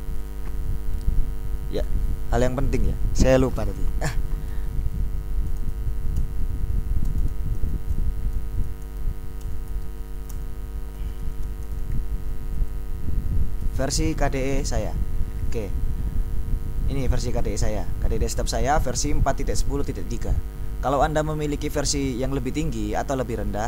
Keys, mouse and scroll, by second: 0.4 click, 1.7 ctrl+alt+t, 5.4-12.6 typing, 15.1-16.2 drag, 17.7-19.7 drag.